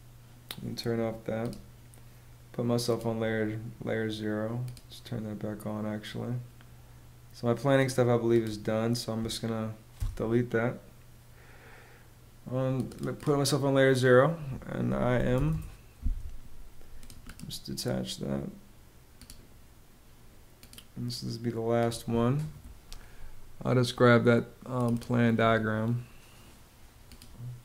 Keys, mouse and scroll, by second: 9.5 BackSpace, 14.4-15.3 typing.